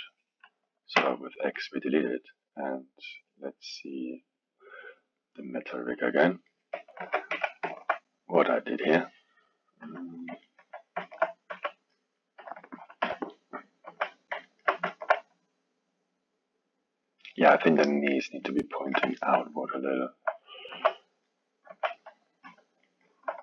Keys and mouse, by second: 0.0-1.0 drag, 1.0 x, 5.5-6.3 drag, 6.3-7.0 middle drag, 7.0 shift+z, 7.3 KP_1, 7.7-8.4 alt+middle drag, 8.4 click, 9.8-10.4 drag, 10.4-11.5 ctrl+middle drag, 11.5 Tab, 11.9-13.0 middle drag, 13.0 KP_3, 13.9 KP_1, 14.4-18.2 ctrl+middle drag, 18.5-19.8 middle drag, 19.8 click, 20.7 r, 21.7 KP_1, 22.5 click, 22.8 middle click.